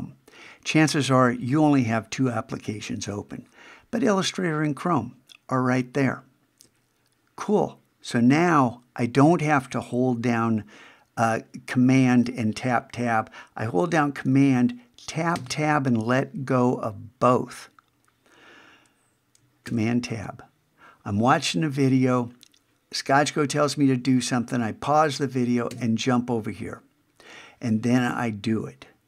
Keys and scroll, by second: 15.3 super+Tab, 19.7 super+Tab, 25.7 super+Tab.